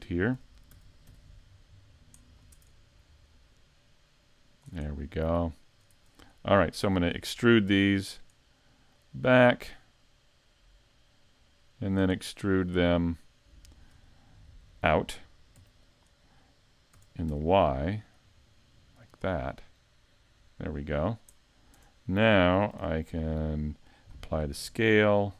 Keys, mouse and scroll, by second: 0.8 s, 2.5 Tab, 3.3 click, 4.9 middle click, 5.9 Tab, 6.4 middle click, 7.7 e, 8.0 click, 9.0 click, 12.2 middle click, 15.6 e, 16.0 click, 16.9 s, 19.2 click, 19.5 middle click, 21.0-21.5 scroll down 3, 21.4 middle click, 21.8 Tab, 22.7 ctrl+a.